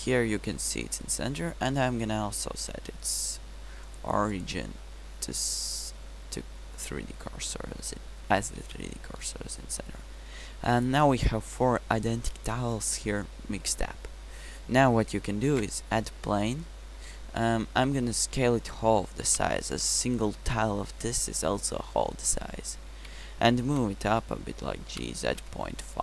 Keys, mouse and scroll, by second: 0.5-1.0 middle drag, 2.8 t, 10.2 t, 15.6 shift+a, 17.9 Tab, 18.5 s, 20.6 Tab, 23.8 g.